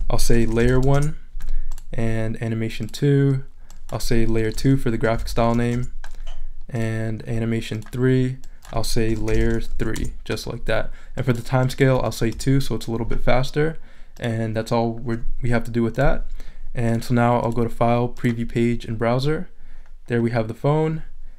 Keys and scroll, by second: 0.2-1.3 typing, 4.3-6.1 typing, 8.8-10.2 typing, 11.9 2, 12.3 Return.